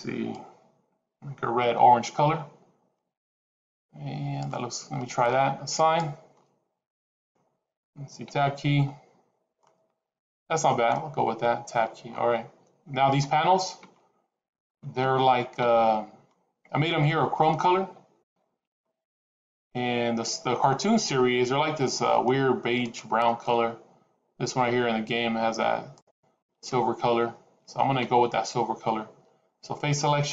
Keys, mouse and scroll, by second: 5.6 click, 8.2 Tab, 9.0-11.0 scroll down 3, 9.5 middle click, 11.6 Tab, 11.9-12.5 scroll up 4, 14.6 Tab.